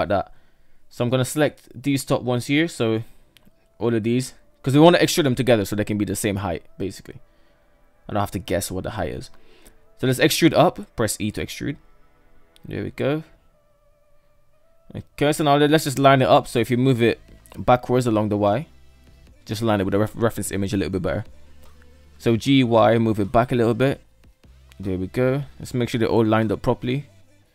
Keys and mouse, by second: 0.2 right click, 0.5 ctrl+z, 1.4 shift+right click, 3.1 shift+middle drag, 3.9 shift+right click, 5.1 ctrl+right drag, 5.9 shift+middle drag, 6.7 shift+right click, 7.5 shift+right click, 8.3 shift+middle click, 8.9 e, 11.9-14.2 shift+middle drag, 15.0 shift+middle click, 20.9 g, 24.5-25.4 shift+middle drag, 26.4-27.0 shift+middle drag.